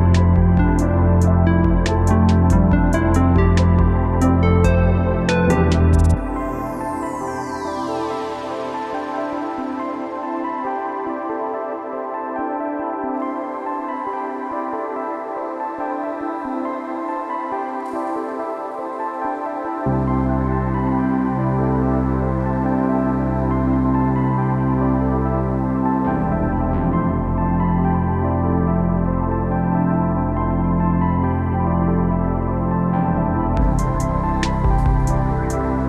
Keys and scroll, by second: 9.0 Return.